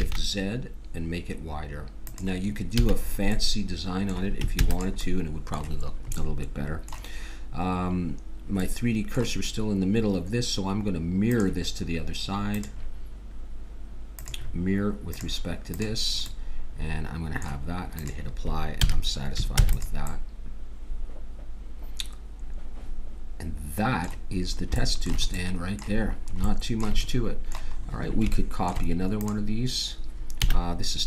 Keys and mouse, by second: 2.8 a, 4.6 ctrl+s, 11.3-14.5 drag, 15.1-17.0 drag, 16.3 middle click, 18.0-19.9 drag, 18.8 a, 19.6 ctrl+s, 25.4-26.9 middle drag, 29.2-31.0 drag, 30.4 a.